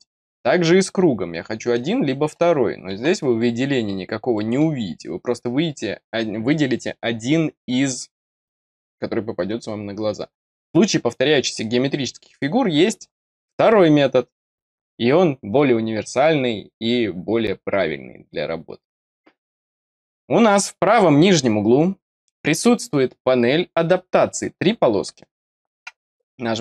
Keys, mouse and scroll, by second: 3.2 click, 4.3 middle click.